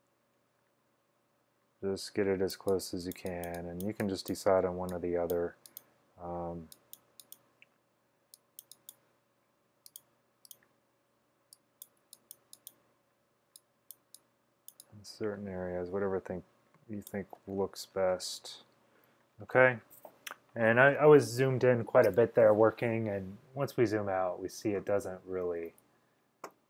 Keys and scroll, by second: 12.1 x.